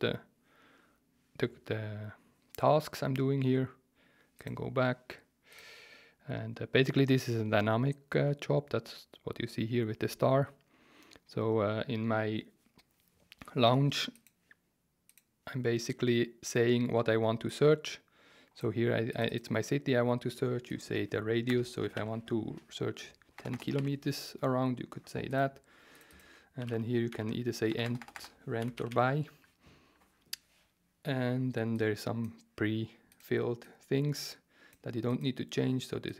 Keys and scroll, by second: 21.5-23.7 typing, 24.8 typing, 26.3-29.2 typing.